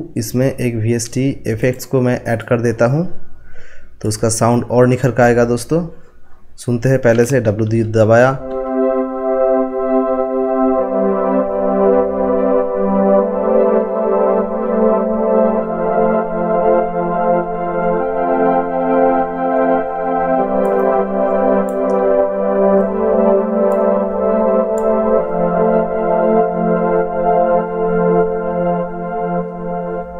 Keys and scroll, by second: 7.6 w.